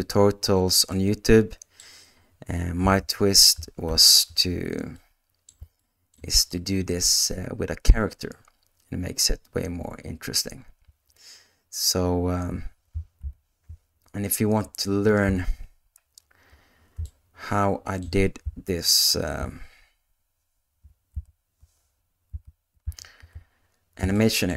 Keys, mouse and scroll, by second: 1.0 middle click, 2.9 space, 3.9 shift+Left, 4.9 middle click, 5.8 shift+middle click, 6.5-7.9 middle drag, 10.8 space, 12.5 space, 13.2 shift+Left, 15.2 KP_0, 17.0 shift+middle click, 18.8 alt+h, 22.1 alt+h, 23.0 alt+a, 24.1 shift+middle click.